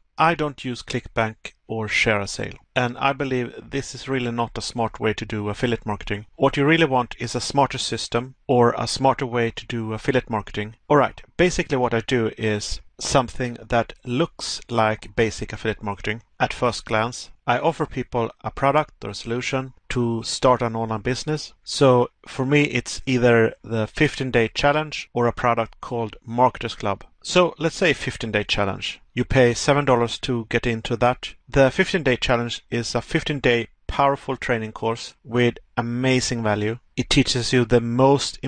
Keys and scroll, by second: 5.3 Pause, 7.6 Pause, 10.0 Pause, 15.0 Pause, 17.1 Pause, 19.4 Pause, 21.4 Pause, 27.5 Pause, 31.6 Pause, 35.0 Pause, 36.8 Pause.